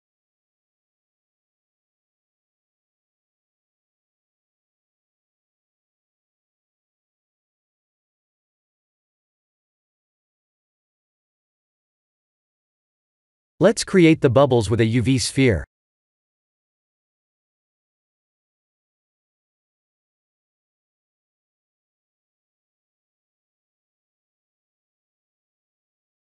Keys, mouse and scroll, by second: 2.2-2.6 scroll down 3, 2.6 middle click, 3.4 click, 3.7 middle click, 7.1-8.1 scroll down 4, 8.2 shift+middle click, 8.6 middle click, 11.1 shift+middle click, 11.5 scroll up 1, 12.6 middle click, 12.6-13.4 scroll up 1, 13.4 click, 13.7 shift+a, 16.1 scroll up 1, 16.3 s, 18.1 KP_1, 19.0 g, 20.6 s, 22.3 right click, 23.2 middle click.